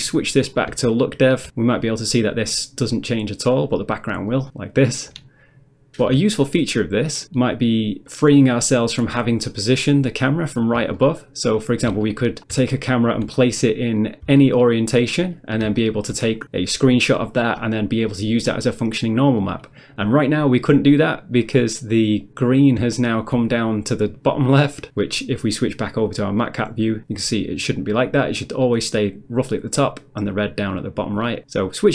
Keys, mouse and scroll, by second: 0.4 scroll up 1, 0.9 shift+middle click, 4.5 click, 5.5 middle click, 6.4 shift+middle click, 8.4 middle click, 8.8 middle click, 9.1-10.1 scroll down 1, 10.1 scroll down 1, 11.0 ctrl+middle click, 12.1 shift+middle click, 12.8 ctrl+middle click, 14.4 shift+middle click, 15.3 shift+middle click, 21.6 middle click, 22.3 middle click, 23.0 shift+middle click, 26.1 click, 31.7 click.